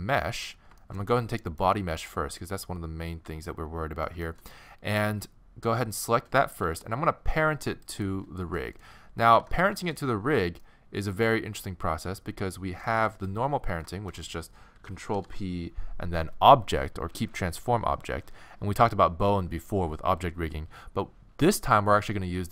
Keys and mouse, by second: 0.8-3.8 middle drag, 6.6 z, 7.8 click, 8.6-9.6 middle drag, 9.4 alt+z, 12.4 middle click, 13.2-15.1 middle drag, 15.1 ctrl+p.